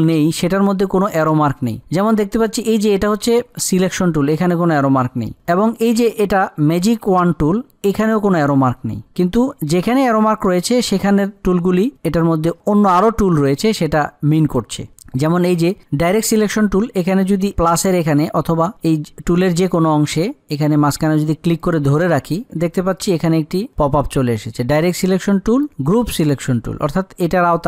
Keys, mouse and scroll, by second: 22.0-27.6 drag.